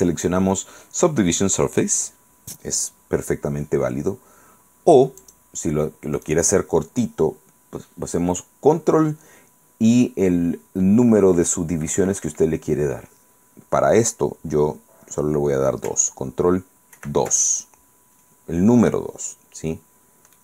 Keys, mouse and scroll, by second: 5.3 click, 6.3 right click, 17.1 ctrl+2.